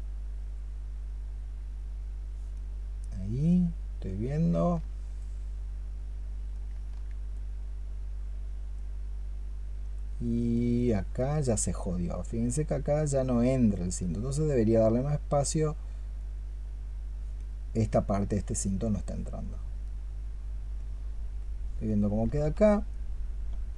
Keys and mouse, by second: 19.6 double click.